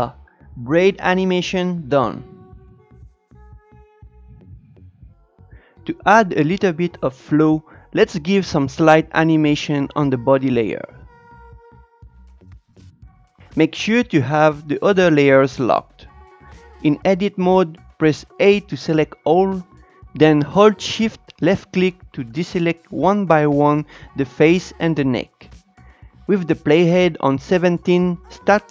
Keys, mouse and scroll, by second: 5.2 click, 10.3 Tab, 19.7-20.7 shift+middle drag, 20.7 shift+click, 21.8 shift+click, 22.5 shift+click, 23.4-24.1 scroll up 4, 25.1-27.6 scroll down 4, 28.0 Tab.